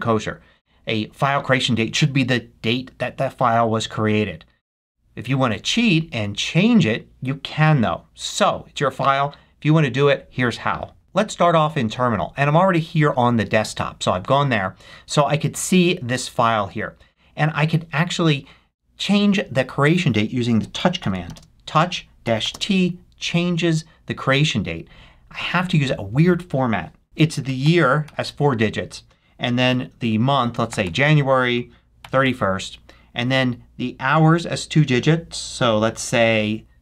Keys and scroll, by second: 20.4-21.3 typing, 27.0 BackSpace, 27.5 2, 28.0 1, 30.5-32.7 typing, 36.6-36.8 typing.